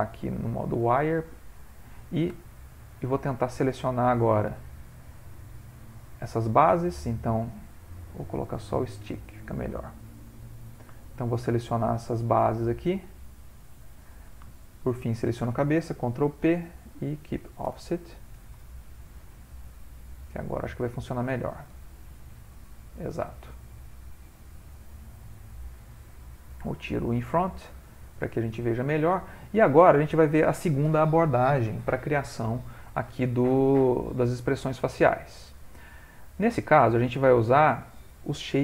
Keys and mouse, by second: 1.5 middle click, 2.6 Tab, 3.0 shift+middle click, 3.6 middle click, 3.7 shift+middle click, 4.2 ctrl+middle click, 4.6 ctrl+middle click, 4.7 middle click, 5.2 middle click, 6.1 click, 8.1 click, 10.4 click, 11.0 shift+click, 11.1 shift+click, 11.7 click, 11.9 shift+click, 13.4 shift+click, 14.7 shift+click, 16.2 ctrl+p, 18.9 ctrl+middle click, 19.7 Tab, 20.7 click, 21.7 r, 27.2 click, 27.8 middle click, 28.0 middle click, 28.4 middle click, 28.7 shift+middle click, 28.8 shift+middle click, 29.2 middle click, 33.6 click, 34.7 middle click, 36.4 click, 37.0 middle click.